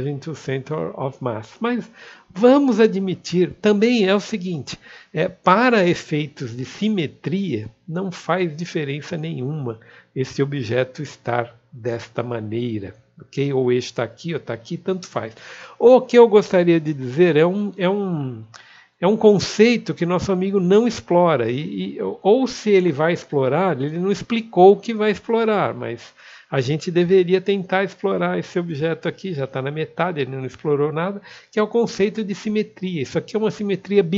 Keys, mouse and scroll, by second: 23.3 click.